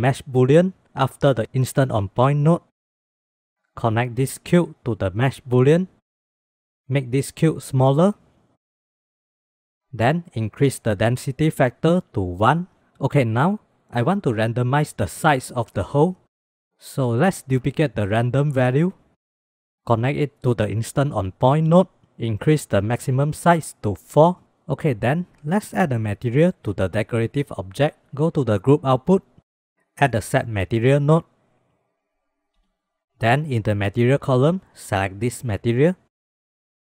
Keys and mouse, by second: 2.9-6.1 drag, 7.6 click, 9.6 click, 10.7-11.8 drag, 16.8 middle click, 17.5 click, 18.0 shift+d, 19.4 middle click, 19.7 middle click, 19.8-21.4 drag, 22.8-24.4 drag, 28.5 click, 29.5 click, 30.5 shift+a, 33.6-35.7 drag.